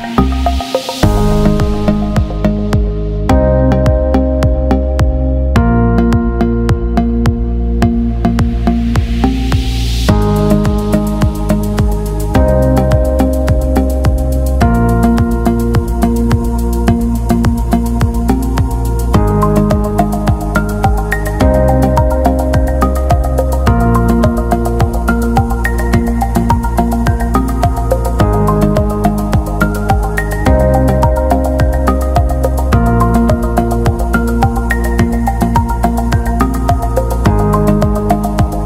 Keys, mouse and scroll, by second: 0.1 click, 1.5 t, 1.9 click, 2.3 ctrl+a, 3.1 click, 4.0 a, 4.1 click, 6.7-7.8 typing, 9.0-9.8 typing, 10.8 click, 17.1 alt+scroll down 1, 20.9 click, 22.1 alt+click, 23.6-24.3 scroll down 1, 24.9-26.1 scroll up 1, 26.1 click, 26.7 alt+click, 29.0 click, 29.3-30.0 alt+scroll down 1, 30.4 click, 30.7-31.3 alt+scroll up 1, 32.0 click, 37.9 ctrl+c.